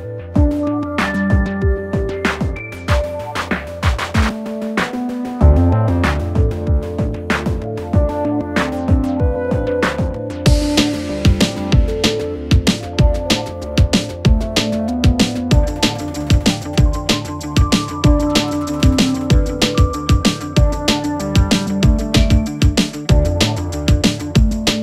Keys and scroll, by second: 8.3 ctrl+d, 8.4 Escape, 11.7 Return, 14.5 ], 17.9 ctrl+z.